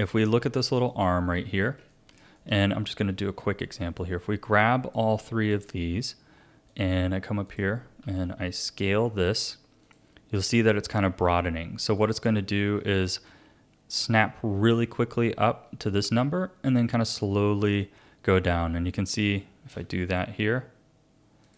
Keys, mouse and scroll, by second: 0.9 click, 1.9-4.0 shift+middle drag, 4.0 click, 6.7-8.0 drag, 8.0 s, 12.0-16.8 drag, 17.4-19.7 drag, 20.1 click, 21.0-21.5 drag.